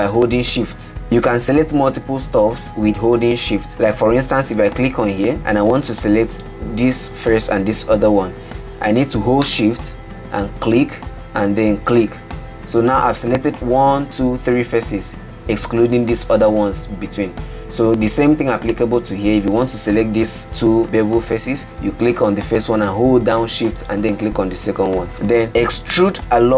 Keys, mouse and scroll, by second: 0.8 shift+click, 5.0 click, 11.0 shift+click, 12.3 shift+click, 19.1 click, 24.2 shift+click, 26.4 e.